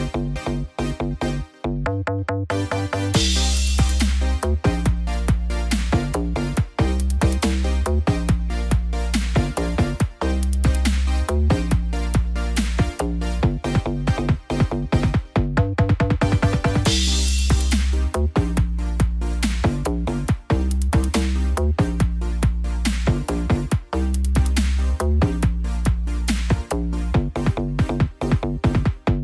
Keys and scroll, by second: 9.5 ctrl+t.